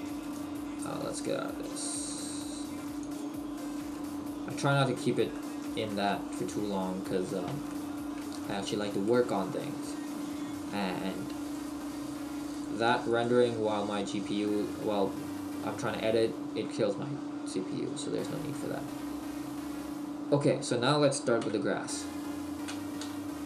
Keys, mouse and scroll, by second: 9.1 shift+middle click, 13.9 middle click, 16.8 middle click, 21.4 KP_1, 23.0 KP_1, 23.0 KP_5.